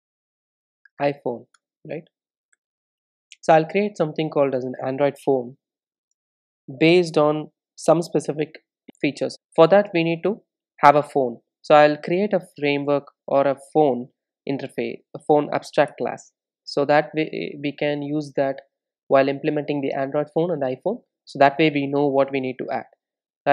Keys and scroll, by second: 14.7 super+n.